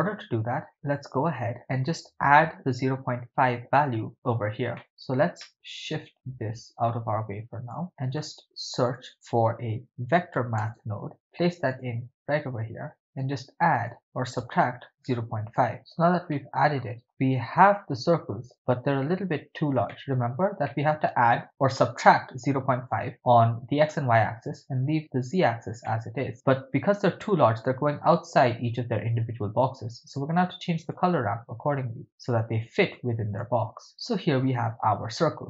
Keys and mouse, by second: 0.7 middle click, 4.8 middle click, 5.4 middle click, 5.8-7.9 drag, 7.9 middle click, 8.8 shift+a, 13.4 shift+click, 13.9-15.6 shift+drag, 15.8 middle click, 16.3 middle click, 19.9 ctrl+middle click, 20.7 middle click, 25.9 middle click, 29.6-30.2 drag, 31.0-32.6 drag, 33.0 click, 33.9 click.